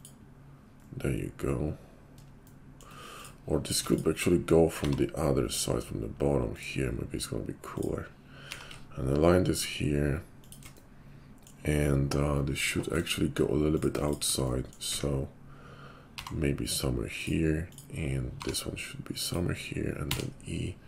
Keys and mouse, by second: 3.0 click, 3.2-17.7 middle drag, 4.8 g, 8.3 g, 14.8 `, 16.1 g, 17.7 click, 17.7-20.8 middle drag, 18.3 g, 20.1 e.